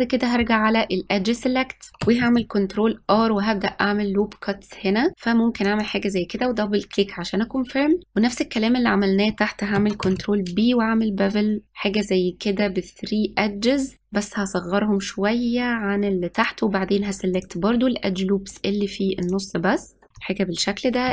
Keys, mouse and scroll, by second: 2.2 ctrl+r, 8.9-10.0 scroll up 1, 10.0 ctrl+b, 17.3 alt+click, 18.4 alt+shift+click, 19.2 alt+shift+click, 20.0 s.